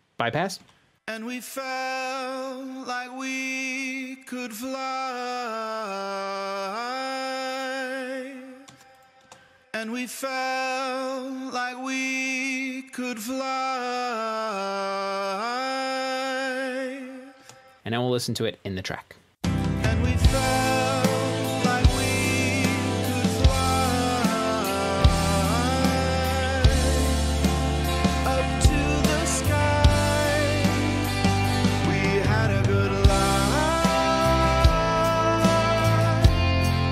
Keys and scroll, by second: 1.6 space, 9.7 space, 10.3 space, 17.7 shift+super+s, 20.4 space.